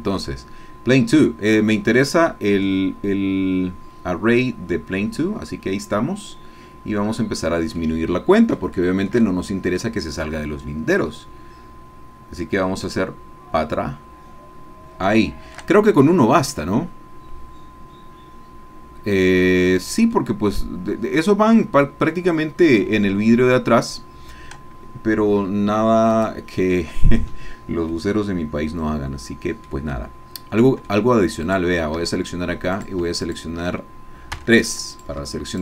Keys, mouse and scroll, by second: 1.8-3.3 drag, 3.3 middle click, 7.8-9.2 drag, 9.2 shift+middle click, 9.3 shift+click, 10.1 middle click, 12.8-14.0 drag, 15.2-17.8 shift+middle drag, 17.8-24.5 drag, 27.9-29.8 drag, 29.9-31.1 drag, 31.6 click, 32.0 Tab, 32.9 click, 33.2 shift+click, 34.4 3, 34.9 click, 35.5 shift+click.